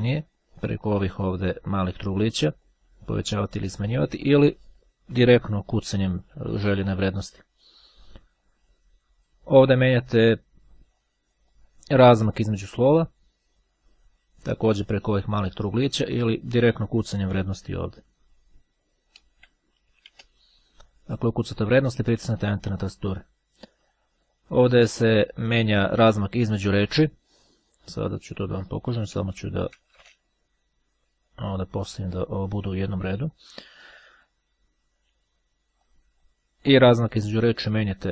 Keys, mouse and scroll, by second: 0.2 click, 2.0-3.3 drag, 4.4 click, 5.6 KP_2, 5.8 KP_Enter, 11.2 click, 12.6 click, 13.8-15.1 drag, 19.3 KP_3, 19.5 KP_Enter, 28.4 click, 29.2 Delete, 32.4 click, 33.4-34.6 drag, 36.0 click, 37.2 click.